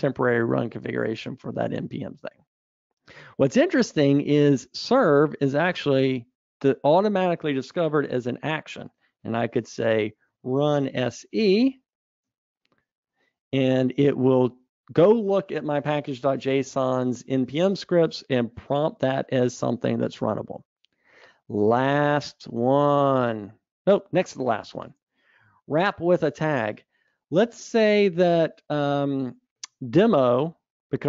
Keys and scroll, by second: 23.0 super+Up.